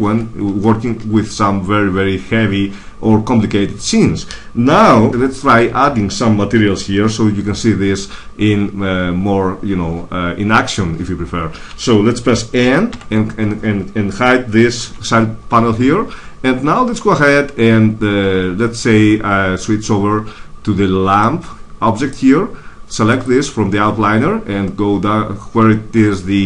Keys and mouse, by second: 5.1 m, 12.8 m, 14.7 n, 21.1-22.9 drag, 22.9 middle click, 23.0-24.9 drag.